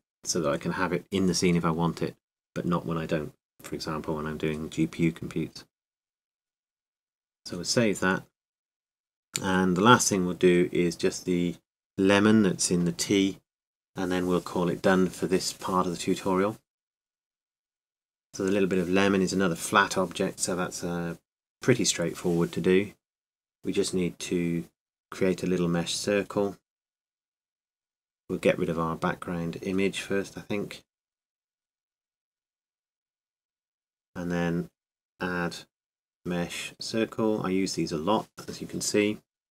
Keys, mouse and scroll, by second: 0.0 m, 1.5-3.8 drag, 7.8-12.5 drag, 27.1-28.4 drag, 28.4 KP_7, 32.4 n, 34.7-39.5 drag.